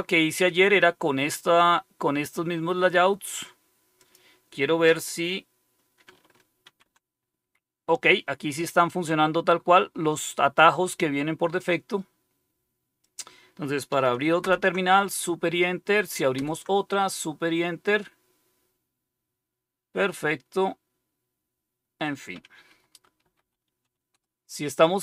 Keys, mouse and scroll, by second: 3.9 click, 6.6 super+r, 13.0 click, 14.3 super+Return, 16.3 super+Return, 22.6-24.3 typing.